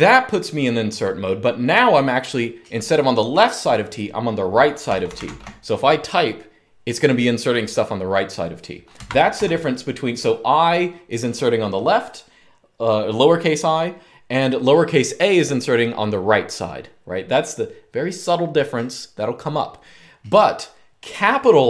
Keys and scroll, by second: 4.4-5.5 typing, 8.8 Escape, 9.1 u.